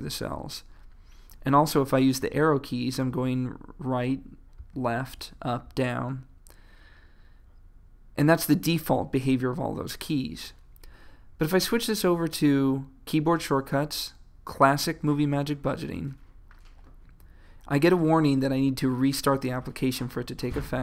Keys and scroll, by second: 3.1 Right, 4.6 Left, 5.2 Up, 5.7 Down.